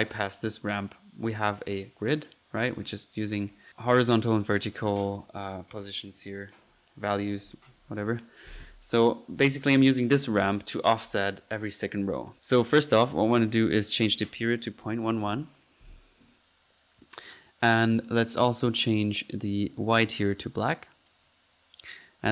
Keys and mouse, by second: 0.1 click, 0.6 click, 3.5 middle click, 9.7-10.1 drag, 14.0-14.3 drag, 14.5 click, 19.8 click, 20.6 click, 21.2 drag.